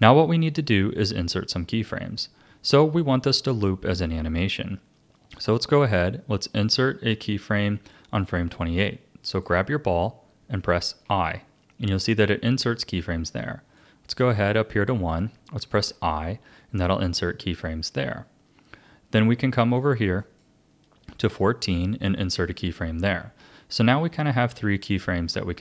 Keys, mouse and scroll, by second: 9.3 click, 13.8-15.6 drag, 20.2-22.1 drag.